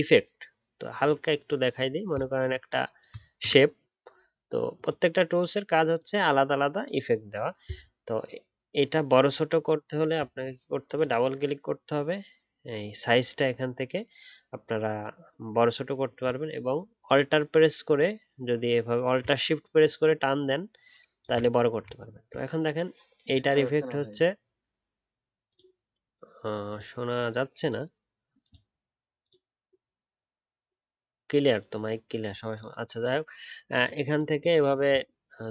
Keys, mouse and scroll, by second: 2.1 shift+click, 9.4-9.9 alt+scroll up 1, 9.9-10.4 alt+scroll down 1, 18.0 alt+click, 22.1-23.2 alt+scroll up 1.